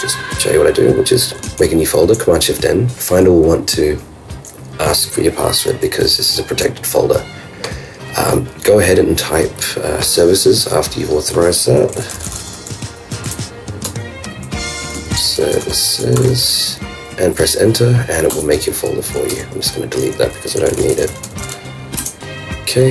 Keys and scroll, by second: 1.6 shift+super+n, 13.9 shift+super+Return, 14.8-15.8 typing, 19.2 super+Home, 19.3 super+BackSpace, 22.0 super+Return.